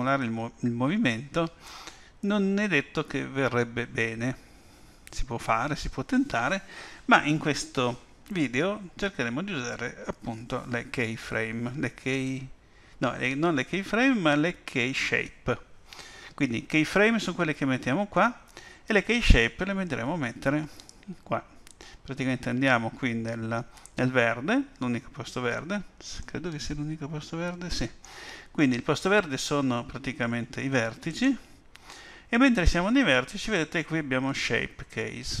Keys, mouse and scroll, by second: 26.2 middle click, 31.1 click.